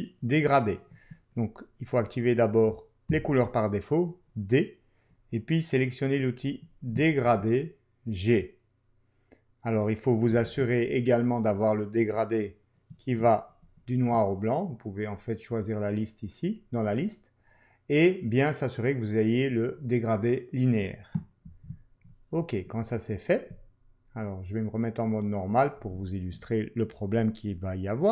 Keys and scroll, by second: 3.1 d, 7.2 ctrl+q, 10.5 ctrl+<.